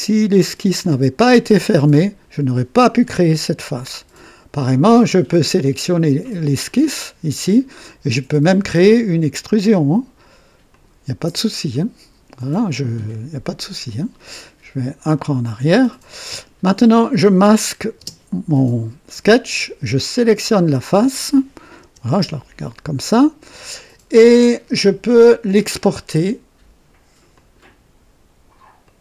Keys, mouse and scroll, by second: 6.6 click, 9.3 click, 10.7 click, 15.0 click, 18.0 space, 20.1 click, 21.8 KP_2, 27.3 click, 28.8 click.